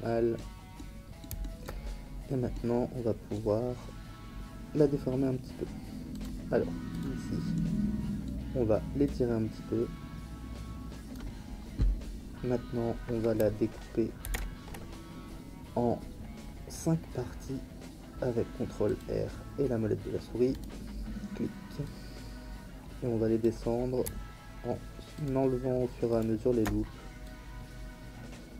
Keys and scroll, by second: 14.2 ctrl+r.